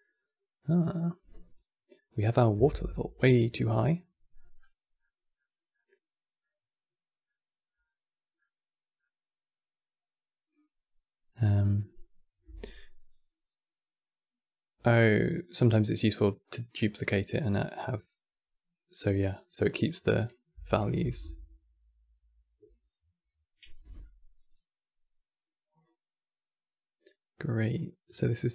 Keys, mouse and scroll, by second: 6.3-6.6 scroll up 5, 6.6-17.2 middle drag, 18.0-28.5 drag.